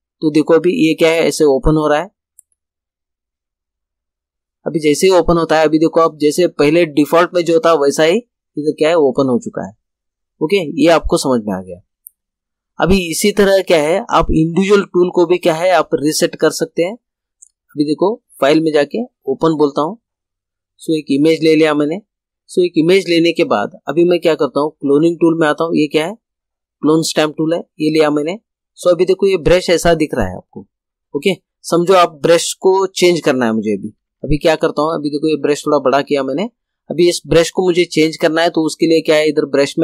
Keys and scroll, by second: 34.0 ].